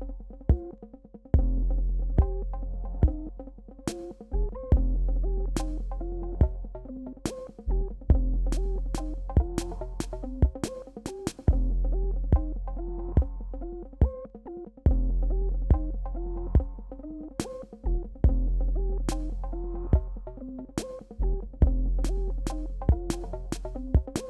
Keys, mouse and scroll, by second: 1.8 click, 2.6 ctrl+z, 3.1 click, 3.6 ctrl+z, 4.3-6.0 drag, 6.2 click, 7.0 ctrl+z, 7.7 click, 8.1 shift+x, 8.3-12.5 drag, 12.5-13.0 alt+scroll down 2, 14.7 click, 17.2 alt+scroll down 1, 19.2 click, 19.9 ctrl+d, 21.0 alt+scroll up 1.